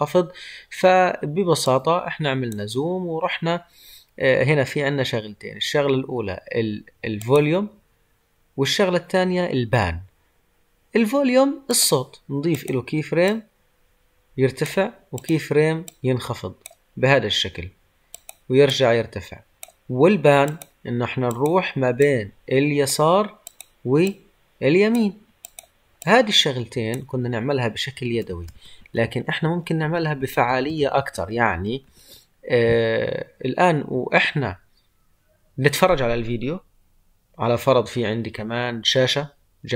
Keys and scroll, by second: 28.1 ctrl+z.